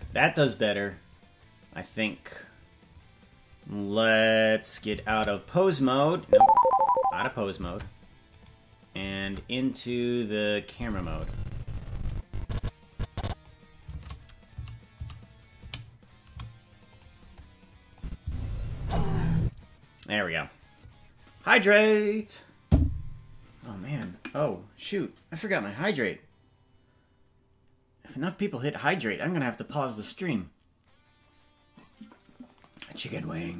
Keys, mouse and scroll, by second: 5.0 shift+`, 7.6 ctrl+Tab, 8.4 right click, 9.1 ctrl+Tab, 10.7-13.4 drag, 13.8 shift+`, 17.9 click, 18.2 space, 19.4 space.